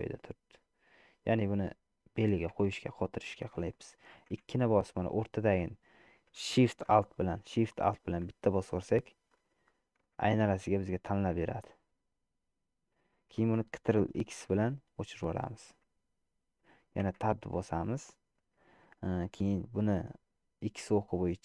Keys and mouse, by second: 2.8 Tab, 4.6 2, 9.4 alt+shift+click, 10.4-13.6 middle drag, 14.8 ctrl+x, 17.2 Tab.